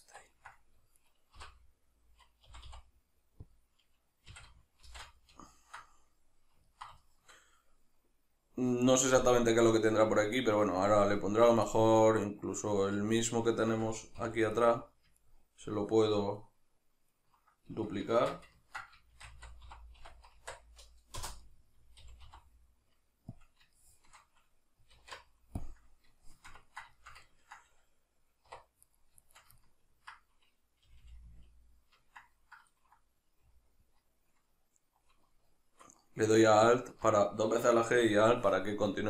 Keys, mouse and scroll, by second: 0.3 ctrl+middle click, 1.0 right click, 1.4 l, 3.6 click, 4.3 a, 4.9 shift+n, 5.4-14.6 ctrl+middle drag, 14.2 3, 14.6 right click, 15.2 ctrl+right click, 16.4 ctrl+right click, 17.2 ctrl+right click, 18.2 shift+Tab, 18.6-23.5 ctrl+middle drag, 19.2 shift+d, 21.3 Return, 22.0 g, 23.5 click, 23.8-28.9 shift+middle drag, 25.0 alt+q, 28.5 1, 28.9 right click, 29.2 shift+right click, 29.6-36.8 ctrl+middle drag, 30.8 g, 36.8 alt+click.